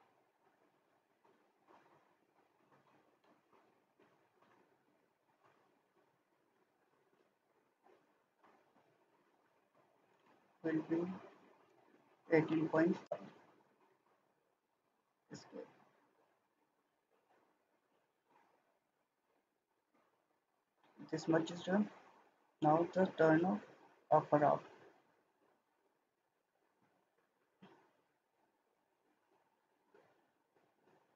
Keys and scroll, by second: 3.4 Escape, 10.6-12.7 typing, 13.0 Return, 14.9 Escape.